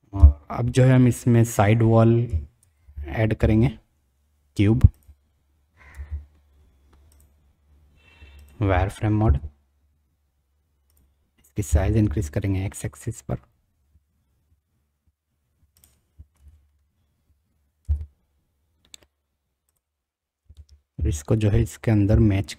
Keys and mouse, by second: 0.1 KP_1, 2.6 shift+a, 5.9 g, 8.4 click, 9.2 s, 11.6 s, 16.3 g, 20.4 g.